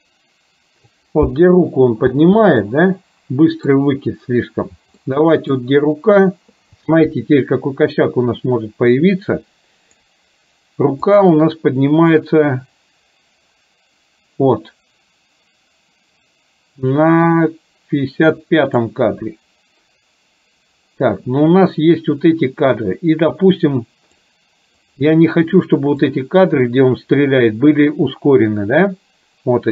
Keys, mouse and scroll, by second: 2.2 space, 2.7-3.7 middle drag, 5.0 middle click, 9.2-10.2 drag, 11.0 click, 12.2-18.9 drag, 23.3-24.3 drag, 24.9 click, 26.0-29.7 drag.